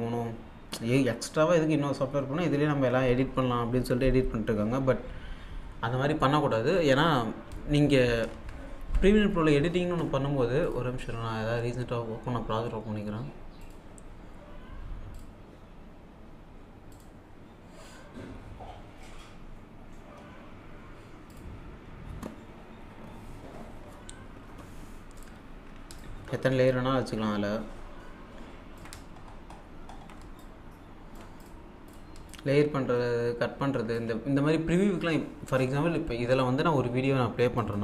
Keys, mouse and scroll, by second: 8.3 alt+Tab, 9.6-10.4 scroll up 1, 10.7 click, 13.6 click, 15.2 click, 16.9 click, 21.3 click, 25.1 click, 26.0-29.1 alt+drag, 29.1-29.8 alt+scroll down 1, 30.4-35.3 alt+drag, 37.6 click.